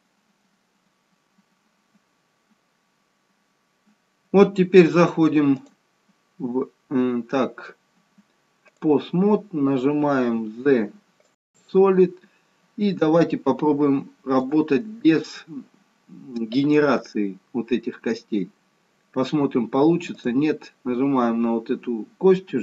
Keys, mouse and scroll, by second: 0.8-1.8 scroll up 1, 1.8 scroll down 1, 2.8-3.5 scroll up 1, 3.5 scroll down 1, 5.8 click, 10.6 z, 14.4 click, 17.0-17.6 scroll up 2, 17.6 scroll down 1, 20.1 click.